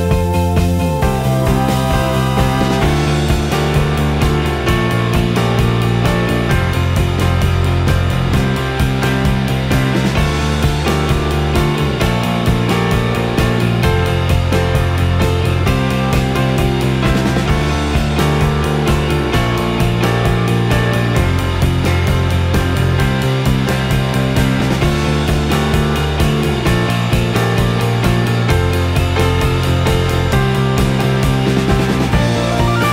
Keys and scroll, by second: 2.7 ctrl+e, 2.9 r, 4.0 w, 5.7 3.